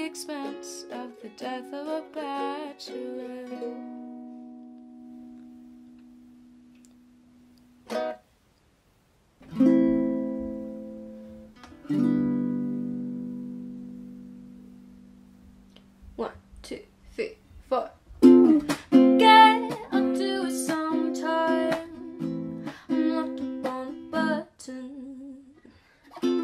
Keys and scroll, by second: 2.1 Delete, 9.6-11.3 typing, 13.1-14.7 typing, 20.8 Delete, 21.6-24.1 typing, 25.3-26.2 typing.